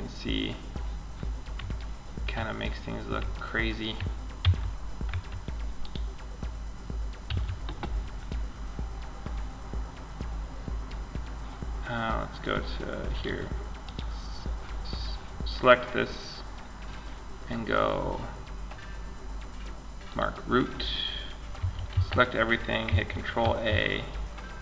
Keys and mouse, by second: 3.6 Tab, 4.3 Tab, 4.8 middle click, 5.0-6.5 drag, 6.5 z, 11.6-14.8 drag, 13.0-14.2 right drag, 14.8-19.3 middle drag, 19.3-21.5 drag, 20.1-21.5 middle drag, 20.8 a, 21.1 a, 22.6 ctrl+a.